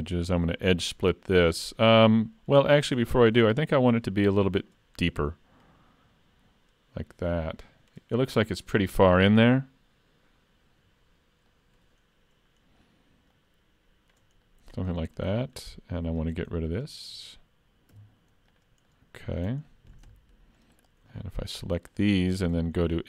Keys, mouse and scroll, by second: 1.9 middle click, 3.0 3, 3.5 click, 3.9 shift+click, 5.7 click, 11.1-13.4 scroll up 2, 11.5 middle click, 13.4 click, 14.5 middle click, 15.0 shift+middle click, 15.4 middle click, 16.2 click, 16.7 shift+click, 18.0 x, 18.9 middle click, 19.7 shift+middle click, 20.2 middle click, 20.8 click, 21.2 shift+click, 22.5 2.